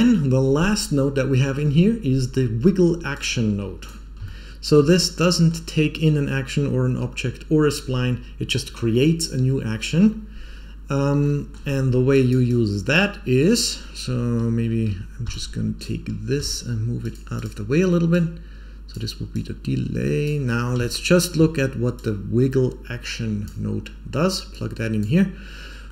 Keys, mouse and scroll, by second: 4.2 shift+middle click, 4.9 scroll up 3, 5.2 middle click, 11.2 middle click, 12.1 click, 12.4-12.8 drag, 13.3-15.2 scroll down 5, 13.4 middle click, 15.2 b, 16.4 g, 17.3 click, 18.0 click, 19.2-20.2 drag, 20.4 scroll up 4, 20.7 shift+middle click, 21.9-23.4 drag, 24.4 click, 25.4-25.8 scroll up 4, 25.8 middle click.